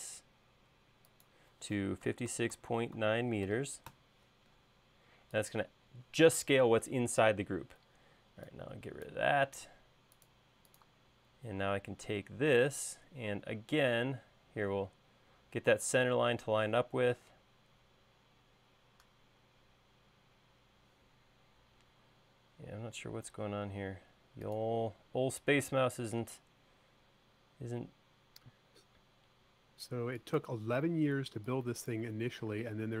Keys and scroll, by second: 1.9-4.0 typing, 8.1 e, 9.7 space, 13.4 l, 31.3 space, 32.7 m.